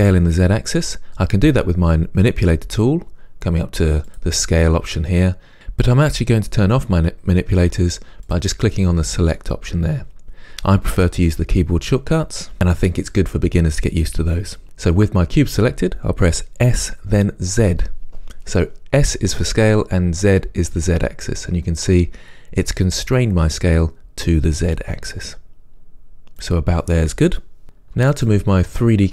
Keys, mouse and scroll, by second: 4.3-16.9 drag, 16.9 s.